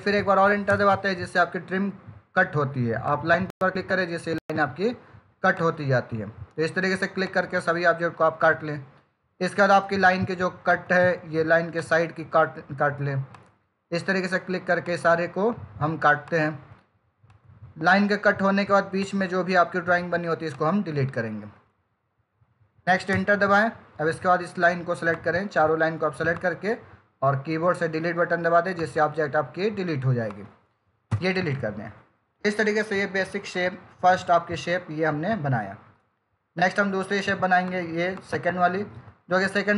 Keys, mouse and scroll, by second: 0.6 Return, 2.9 click, 23.0 Return, 25.0 click, 31.0 Delete, 36.5 click.